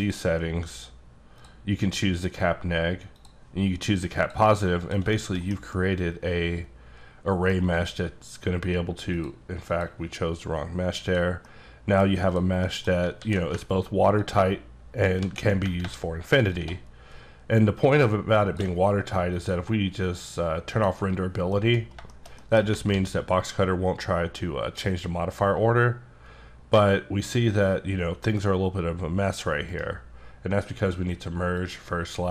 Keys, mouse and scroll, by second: 0.0 click, 0.4 click, 1.4 click, 3.2 click, 4.8 click, 5.1 shift+middle click, 5.5 scroll down 1, 5.7-7.6 middle drag, 7.7 click, 9.1 click, 9.7 click, 11.1 click, 11.4 middle click, 12.3 click, 12.6 middle click, 13.2 alt+w, 14.2 ctrl+click, 15.2 ctrl+z, 16.5 ctrl+click, 20.0 click, 21.6 middle click, 21.8 scroll up 3, 22.1 shift+middle click, 22.9 alt+w, 25.1 click, 29.7 right click, 30.8 click, 31.6 click.